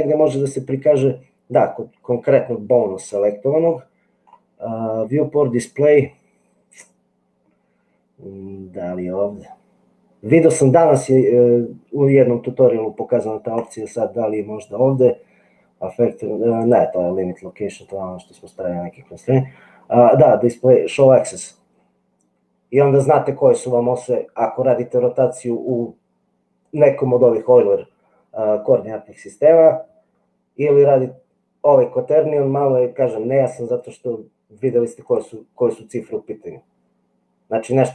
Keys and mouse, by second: 13.6 click, 16.6 click, 17.9 click, 26.7-33.9 drag, 34.5 click.